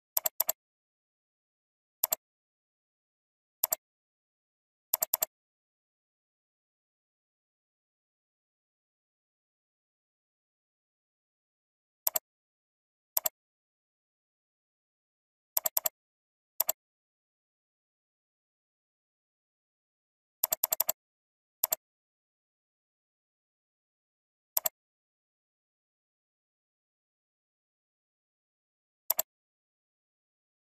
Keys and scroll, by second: 7.0 alt+Up, 8.1 alt+Down, 8.7 alt+Up, 10.0 alt+Down, 20.7 ctrl+space.